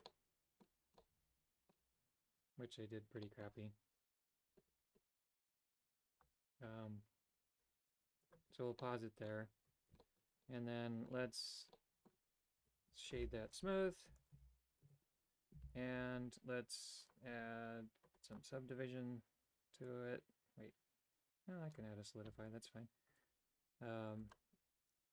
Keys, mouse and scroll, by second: 0.2 middle click, 1.2 middle click, 3.3 middle click, 8.2 click, 8.8 middle click, 9.5 Tab, 10.0 shift+middle click, 10.4 middle click, 11.7 middle click, 12.5 space, 17.0 click, 17.4 typing, 18.3-21.7 drag, 24.3-25.1 drag.